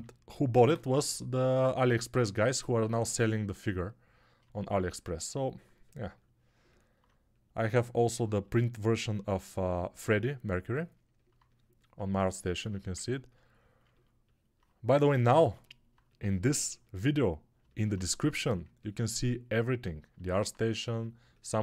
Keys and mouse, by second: 0.9 g, 4.0-21.6 shift+drag.